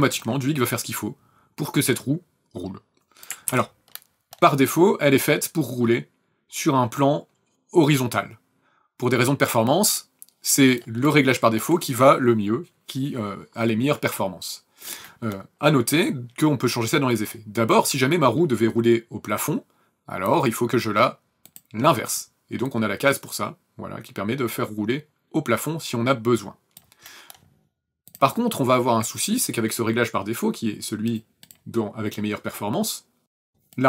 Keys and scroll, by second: 3.5 ctrl+z.